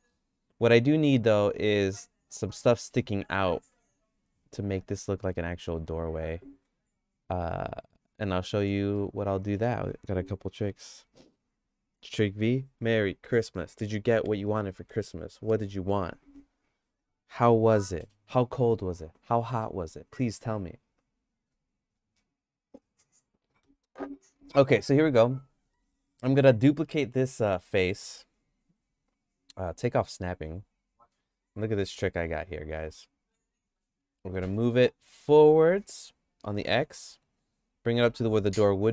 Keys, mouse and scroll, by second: 2.7 middle click, 8.5 middle click, 9.0 shift+middle click, 24.1 click, 24.8 click, 25.0 Tab, 25.7 middle click, 26.1-27.8 shift+middle drag, 28.2 shift+d, 32.5 Tab, 33.3 Tab, 34.4 g.